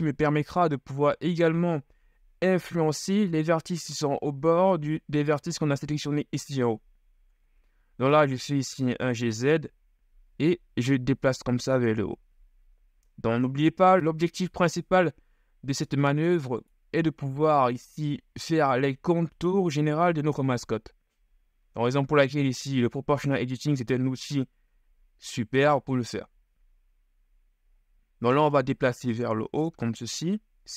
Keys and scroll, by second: 8.4 shift+g, 8.8 shift+z.